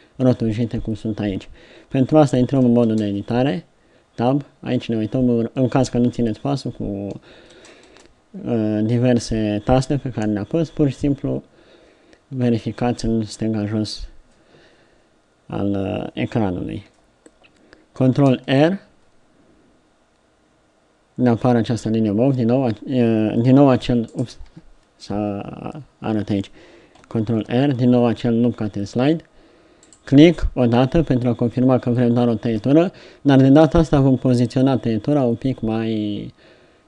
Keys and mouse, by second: 2.9 Tab, 7.5 Tab, 7.9 Tab, 18.3 ctrl+r, 24.5 t, 27.4 ctrl+r.